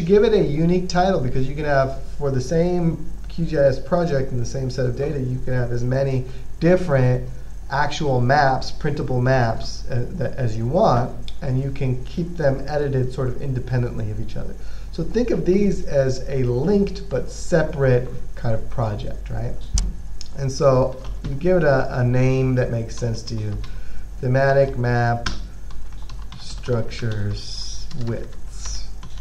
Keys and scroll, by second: 21.0-22.0 typing, 23.0-29.2 typing.